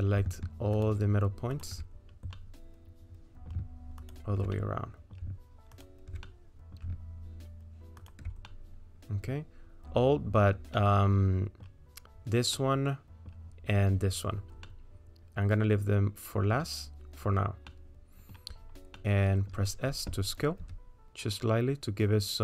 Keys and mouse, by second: 2.4-3.5 middle drag, 4.0 ctrl+click, 4.5 middle click, 5.7 ctrl+click, 6.3 middle click, 8.0 ctrl+click, 8.5 middle click, 10.8 middle click, 12.6 middle click, 14.7-16.6 middle drag, 17.7 middle click, 19.0 middle click, 20.6 s.